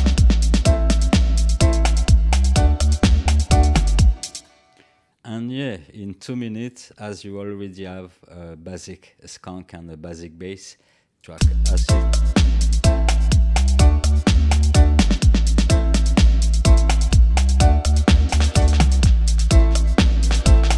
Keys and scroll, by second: 4.3 space, 11.3 space.